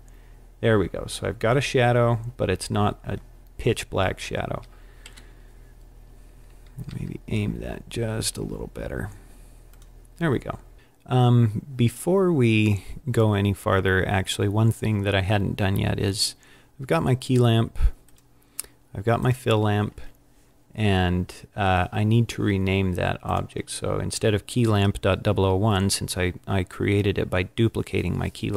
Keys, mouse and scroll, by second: 5.0 KP_1, 6.8 r, 9.8 click, 10.7-11.2 scroll down 2, 18.0 click, 19.1 click, 23.1 click.